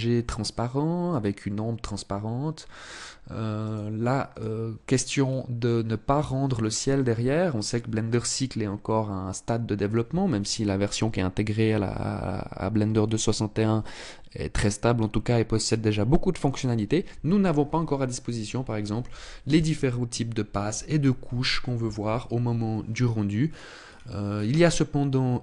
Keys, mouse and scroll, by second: 3.2 click, 3.9 click, 4.7-5.4 scroll down 2, 23.0-25.4 scroll down 14.